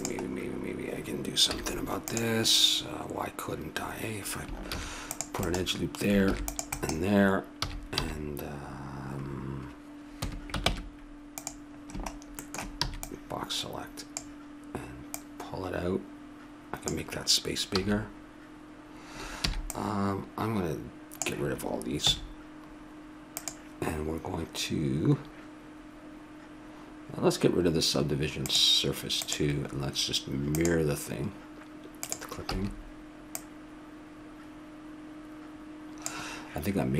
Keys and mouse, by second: 1.5 z, 4.7 ctrl+r, 6.3 ctrl+r, 7.6 a, 8.0 b, 10.7 ctrl+Tab, 11.8 middle click, 12.8 b, 15.1-17.0 drag, 17.7 a, 19.5 b, 22.1 x, 28.4-31.4 drag, 32.0-35.0 drag, 32.5 a.